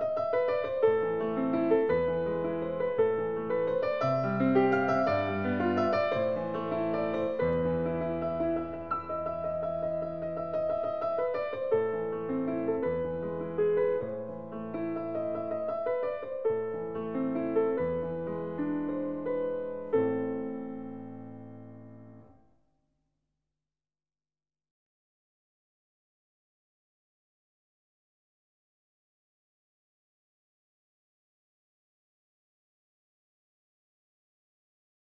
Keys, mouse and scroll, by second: 2.0 click, 3.9 middle click, 4.2 middle click, 5.9 click, 6.9 middle click, 7.0 middle click, 7.1 scroll, 8.2-8.6 scroll, 9.8 click, 11.6 click, 12.9 click, 13.9 click, 14.6-15.3 typing, 17.2 click, 19.3 click, 20.3 4, 20.8 Return, 22.6 click, 25.4 click, 26.6-27.3 scroll, 27.7-28.5 ctrl+scroll, 28.6 scroll, 29.1-30.0 ctrl+scroll, 30.8 scroll, 31.7 ctrl+scroll, 32.3-32.7 scroll, 33.1-33.4 scroll, 34.0 click, 34.7 right click.